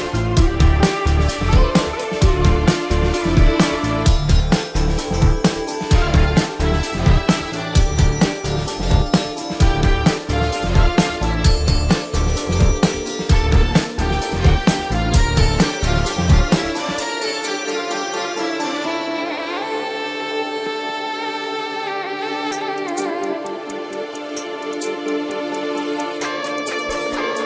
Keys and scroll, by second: 0.7 ctrl+alt+z, 4.1 ctrl+-, 4.9 ], 5.4 ], 24.4 ctrl+alt+z, 24.7 ctrl+alt+z, 26.4 ctrl+-.